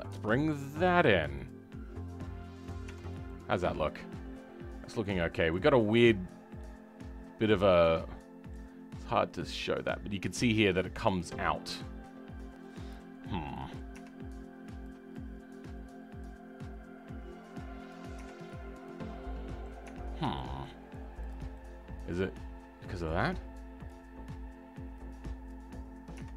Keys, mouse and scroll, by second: 3.0 scroll down 2, 3.2-4.5 middle drag, 4.5-5.0 scroll up 4, 5.0-8.7 middle drag, 8.7-9.3 scroll up 2, 9.3-11.3 middle drag, 11.3-11.6 scroll down 5, 11.6-13.2 middle drag, 13.2-13.5 scroll up 2, 13.5 right click, 14.1-15.1 scroll up 2, 15.1 click, 16.3-18.1 drag, 18.1 Tab, 18.3-18.7 scroll down 4, 18.7-19.8 middle drag, 19.8 Tab, 20.3 shift+middle click, 21.3 click, 21.5-23.8 middle drag, 23.8 click, 25.0-26.1 drag, 26.1 Tab.